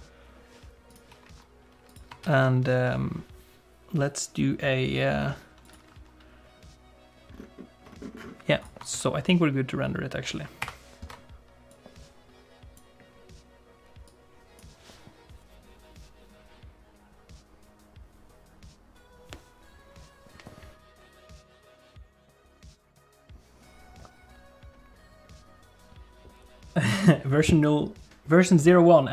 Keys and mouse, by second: 0.9 click, 2.0 click, 2.3 ctrl+s, 9.0 ctrl+s, 10.9 ctrl+F12.